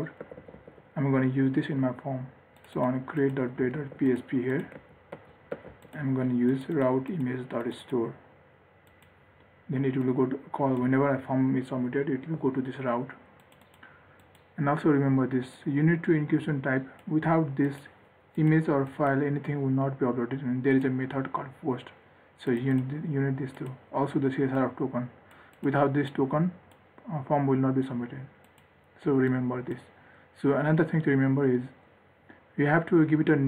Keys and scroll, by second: 0.6 ctrl+s, 4.1 ctrl+s, 5.1 ctrl+z, 5.9 ctrl+s.